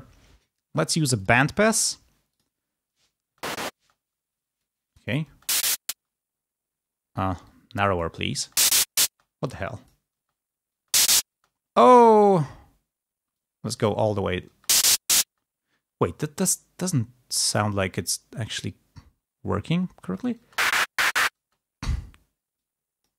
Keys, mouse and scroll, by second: 1.1 click, 2.4 click, 3.2 space, 4.6 click, 5.2 space, 7.5 click, 8.3 space, 9.4 click, 10.1 space, 13.2 click, 14.4 space, 15.2 space, 16.3-17.9 drag, 20.3 space, 21.6 space, 22.5 click.